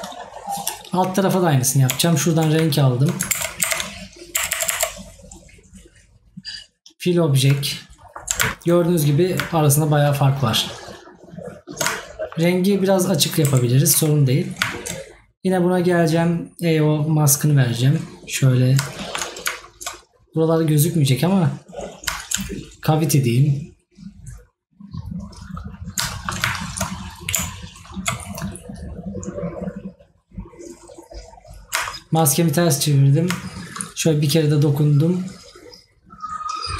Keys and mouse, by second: 8.0 right click, 12.1 right click, 19.0 right click, 26.1 right click.